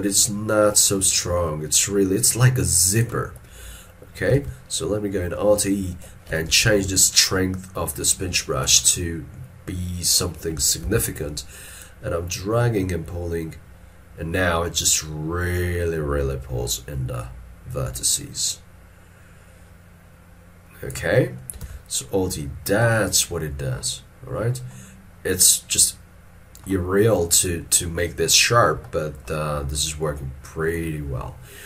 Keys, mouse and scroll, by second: 4.4 alt+e, 6.7 shift+f, 11.0 alt+e, 22.5 scroll down 1, 28.8 middle click.